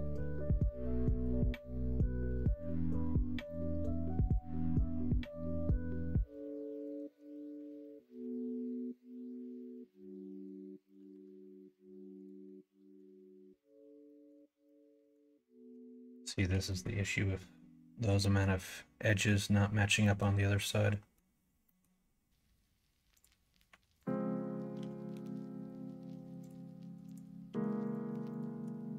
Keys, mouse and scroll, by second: 0.3 click, 1.4 middle click, 2.2 2, 4.2 click, 5.4 click, 6.3 shift+click, 9.7 middle click, 11.0 ctrl+r, 12.4 middle click, 14.0 middle click, 14.6 middle click, 16.1 shift+middle click, 16.6 middle click, 17.3 middle click, 18.1 middle click, 19.0 middle click, 20.0 middle click, 20.5 middle click, 21.6 middle click, 23.6 1, 23.9 click, 24.7 g, 27.4 2, 28.2 shift+click.